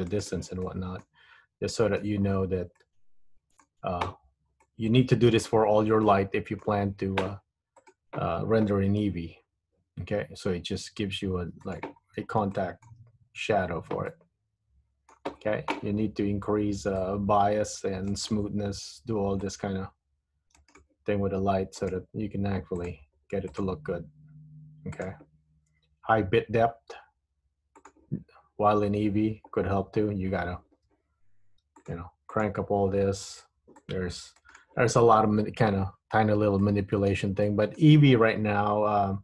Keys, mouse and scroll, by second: 0.7 middle click, 1.3 scroll up 2, 1.9 middle click, 2.3-3.0 scroll down 6, 2.9 middle click, 4.8 shift+middle click, 6.2 middle click, 7.9 click, 9.2 g, 12.2 scroll up 3, 12.6 shift+middle click, 13.2-13.8 scroll up 2, 13.8-14.2 scroll down 2, 14.2 middle click, 17.2 click, 19.6 click, 21.9 click, 23.0 click, 23.8 click, 25.0 click, 28.0 click, 32.0 click, 32.5 click, 33.9 click, 36.2-36.8 scroll up 5, 36.8 middle click, 37.6 shift+middle click.